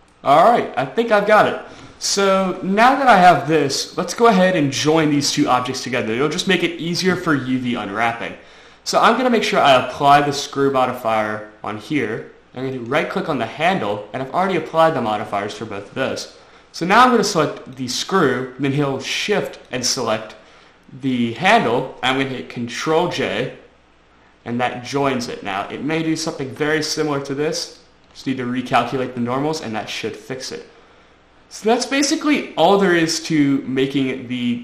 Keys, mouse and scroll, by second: 0.6 middle click, 2.1-3.5 shift+scroll up 3, 11.2 click, 13.2 right click, 18.2 right click, 20.1 shift+right click, 23.5 ctrl+j, 26.8 Tab, 28.1 click, 28.5 Tab, 29.6 middle click.